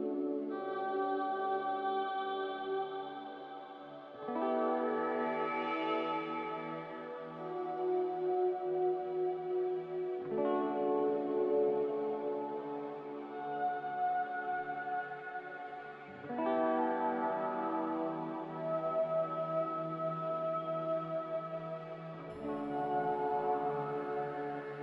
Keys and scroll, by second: 5.3 Delete, 9.9 ctrl+c, 16.2 ctrl+v, 23.8 q.